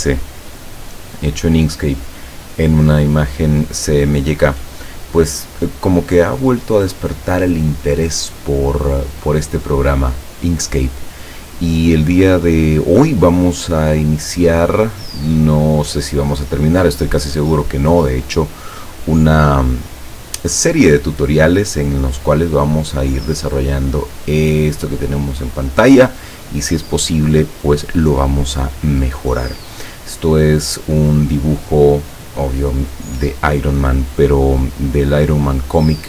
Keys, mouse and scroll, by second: 19.0 click.